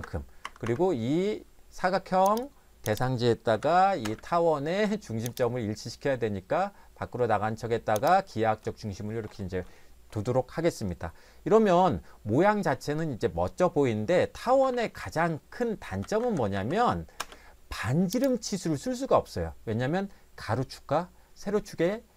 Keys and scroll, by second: 0.0 Return, 0.4 Escape, 0.6 Escape, 3.5 m, 4.0 space, 14.4 Escape, 14.7 Escape, 14.9 Escape, 15.8-17.2 typing.